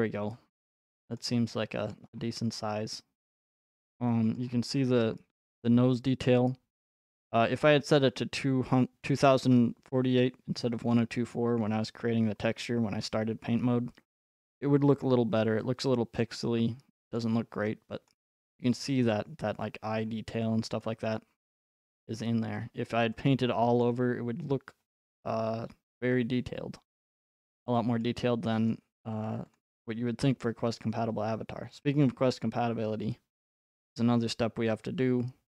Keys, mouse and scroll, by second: 1.2-1.7 scroll, 2.2-3.2 scroll, 3.4 scroll, 4.4-5.2 scroll, 10.8-11.8 scroll, 14.5-16.2 scroll, 16.2 scroll, 19.0-20.1 scroll, 19.3-23.0 middle drag, 20.1-20.8 scroll, 20.8-21.9 scroll, 21.9-22.4 scroll, 23.0 right click, 23.8 middle click, 23.8-24.3 scroll, 24.5-25.8 scroll, 26.8 scroll, 27.6 scroll, 33.9 click.